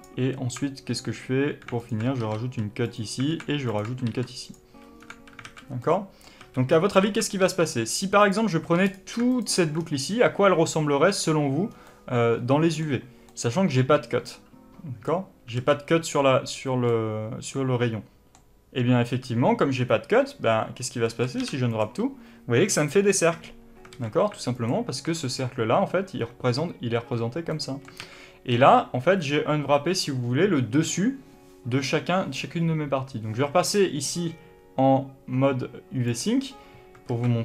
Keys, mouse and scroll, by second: 1.7 alt+click, 2.1 ctrl+e, 3.2 alt+a, 3.6 alt+click, 4.0 ctrl+e, 4.6 a, 4.9 scroll down 2, 5.0 a, 5.7 middle click, 6.3 a, 6.6-7.0 scroll up 1, 7.0 alt+a, 7.3 3, 8.1 click, 8.8 shift+click, 9.2 alt+click, 9.7-10.1 scroll down 1, 10.1-11.6 scroll up 1, 11.6 scroll down 1, 11.8-13.6 middle drag, 15.5 alt+a, 15.5-17.2 middle drag, 20.8-24.5 middle drag, 23.9 alt+a, 24.5 alt+click, 27.4-36.0 middle drag, 27.9 alt+a, 36.0 click, 37.0 alt+a.